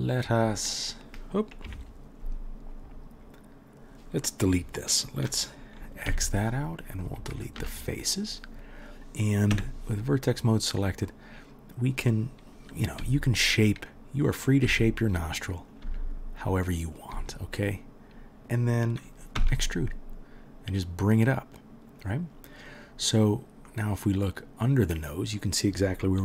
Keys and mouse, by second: 1.6 KP_Decimal, 3.0-3.8 drag, 3.8-10.3 middle drag, 6.1 x, 7.3 Down, 9.5 1, 10.3 click, 10.5-15.7 middle drag, 13.0 g, 14.6 g, 15.7 click, 15.8-17.0 middle drag, 15.8 g, 17.0 click, 17.1 g, 17.8-26.2 middle drag, 19.4 e.